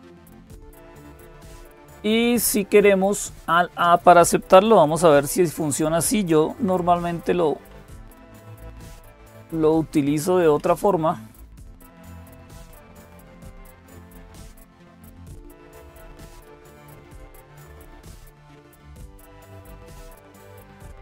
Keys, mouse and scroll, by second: 0.0-21.0 typing, 0.4 click, 6.2 super+Tab, 7.6 super+Tab, 8.9 click, 10.4 Up, 13.7 click, 16.2 Up, 16.2 Return, 19.0 click.